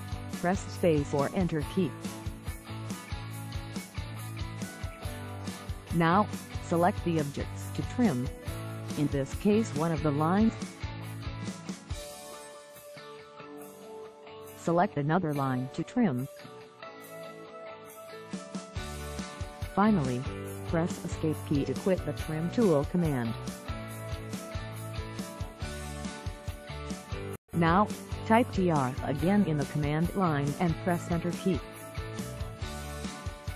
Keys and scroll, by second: 18.1 Escape, 23.9 Escape, 32.6 Return.